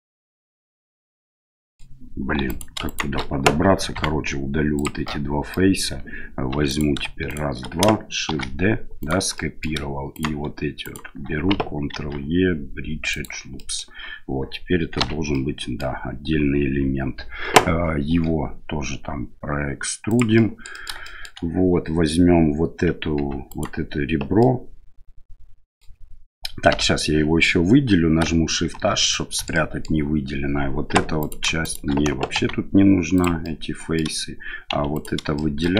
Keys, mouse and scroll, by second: 1.3 middle click, 2.4 3, 2.4 right click, 2.8 shift+right click, 3.9 x, 5.0 middle click, 6.5 2, 6.7 right click, 7.3 shift+right click, 8.3 shift+d, 9.4 middle click, 10.1 right click, 10.8 right click, 11.9 ctrl+e, 13.6 middle click, 15.0 l, 15.4 middle click, 18.1 e, 20.4 middle click, 21.1 shift+middle click, 23.2 2, 23.5 right click, 24.4-25.8 middle drag, 26.7 l, 28.7 shift+h, 29.1 middle click, 29.5 middle click, 30.9 3, 31.2 right click, 31.6 shift+right click, 32.3 x, 33.4 middle click, 34.7 2, 34.9 right click, 35.3 shift+middle click.